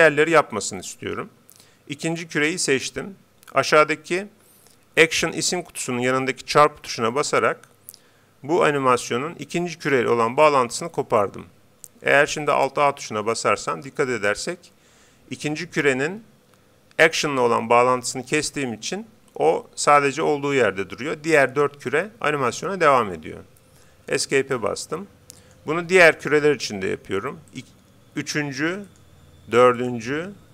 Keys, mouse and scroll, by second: 10.9-12.6 drag, 13.1 alt+a, 24.2 Escape, 25.4-27.1 right drag, 27.5-29.3 drag, 28.9-30.5 right drag, 29.8-30.5 drag.